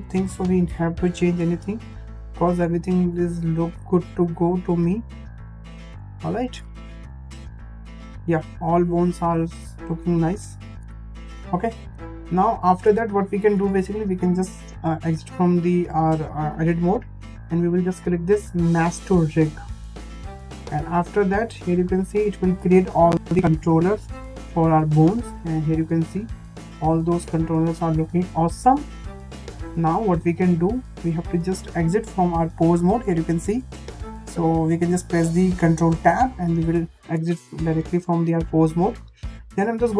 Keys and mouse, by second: 2.7 click, 3.4 click, 5.0 click, 6.0 shift+middle click, 7.8 shift+middle click, 9.7 click, 12.6 shift+middle click, 13.5 Tab, 19.5-23.3 drag, 24.6-25.1 middle drag, 25.7-26.9 middle drag, 27.5 shift+middle drag, 27.9-28.7 middle drag, 29.0 shift+middle drag, 29.8-30.3 middle drag, 30.7 shift+middle drag, 35.8 ctrl+Tab, 37.6 shift+middle click, 37.9 shift+middle click, 38.9 click.